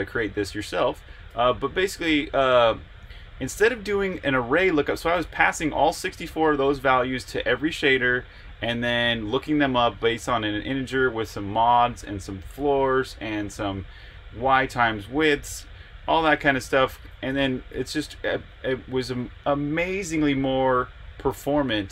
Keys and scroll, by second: 1.3-1.6 typing, 2.8 j, 17.4 Escape.